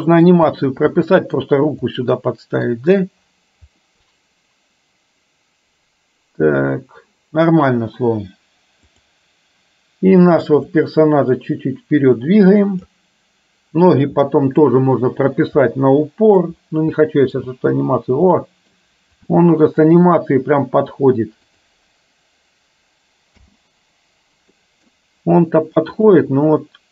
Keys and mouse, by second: 0.1 middle click, 1.2 middle drag, 2.1 middle click, 3.8-6.5 middle drag, 10.7-13.0 drag, 14.3 middle click, 15.8 middle click, 17.1 middle click, 17.5 space, 18.5 middle click, 19.5 shift+middle click, 21.6 click, 23.5 space, 24.7 middle click, 26.1 click.